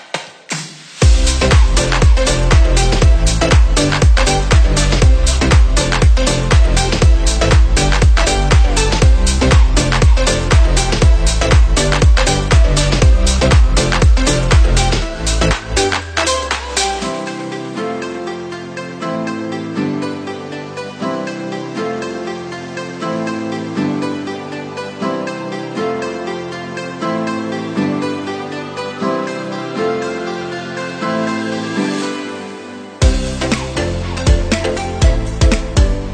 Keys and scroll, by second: 2.5 shift+a, 5.5 ctrl+=, 11.2 ctrl+=, 20.5 ctrl+=, 25.7 ctrl+=, 28.4 Delete, 31.2 ctrl+0.